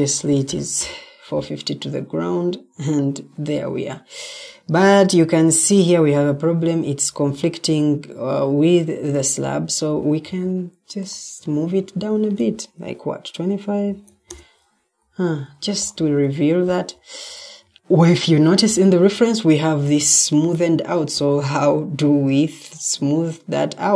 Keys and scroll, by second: 3.7-4.6 typing, 12.0 shift+Tab, 13.5-14.4 typing, 17.1-17.8 typing.